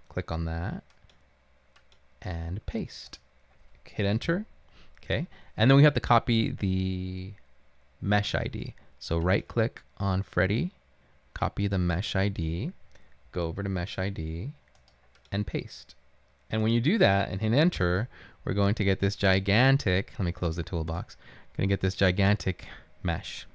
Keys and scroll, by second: 4.3 Return, 17.9 Return.